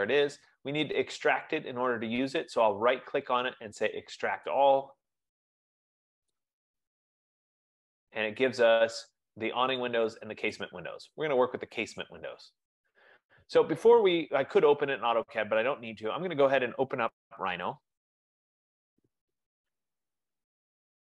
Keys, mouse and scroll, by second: 2.9 right click, 4.7 click, 6.8 click, 7.0 F15, 10.0 click, 10.7 click, 17.9 click, 18.3 click.